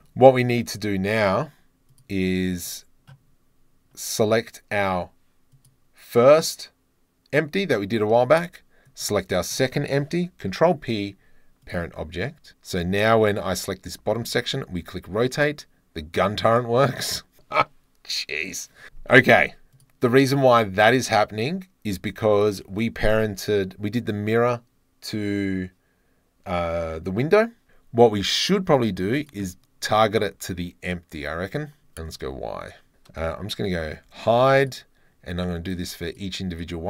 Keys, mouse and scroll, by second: 1.9 click, 5.6 click, 8.9 shift+click, 10.5 ctrl+p, 13.3 click, 13.9 r, 14.3 z, 19.8 click, 22.4 click, 28.8 click, 29.2 click, 32.1 click, 32.7 click, 34.1 h, 34.6 click, 36.1 click, 36.6 click.